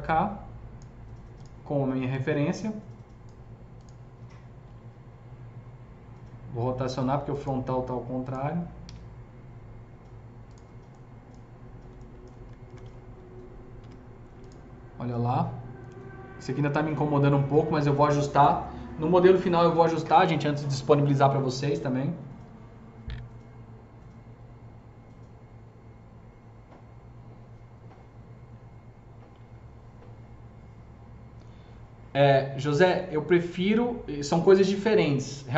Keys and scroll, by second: 4.2 f, 4.7 z, 8.8 z, 12.4 F3, 12.6 F3, 13.7 F4.